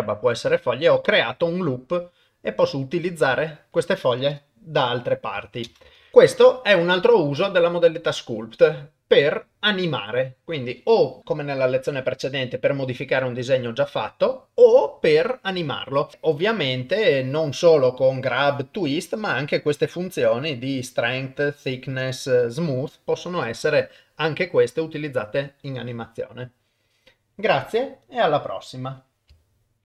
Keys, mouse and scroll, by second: 2.5 middle click, 3.4 shift+middle click, 5.7 shift+space, 6.0 ctrl+s, 6.1 shift+middle click, 16.1 ctrl+Tab.